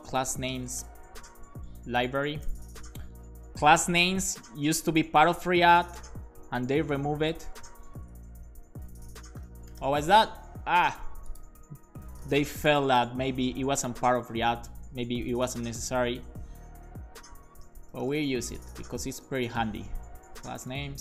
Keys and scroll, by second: 0.0-2.7 typing, 1.9 super+Right, 2.2 Left, 2.4 Left, 3.3 super+s, 3.4 Left, 3.6 Left, 4.2 alt+shift+Right, 4.6 alt+shift+Left, 5.9 shift+Right, 6.5 super+c, 6.7 Left, 7.3 super+v, 7.5 ,, 7.6 space, 8.1 Left, 8.6 Left, 9.1-10.2 typing, 12.0-15.5 typing, 16.6 alt+shift+Left, 17.5 s, 17.7 space, 20.0-21.0 typing.